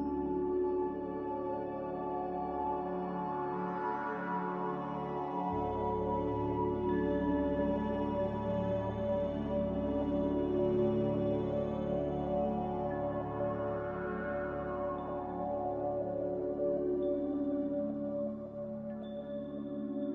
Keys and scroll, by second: 3.8 a, 6.9 f.